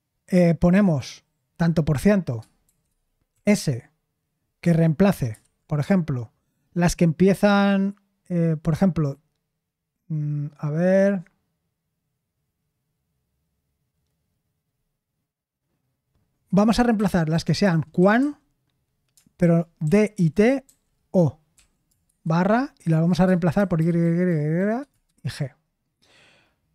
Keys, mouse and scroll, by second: 2.4-3.8 typing, 5.3 /, 16.9-22.0 typing, 23.5-25.7 typing.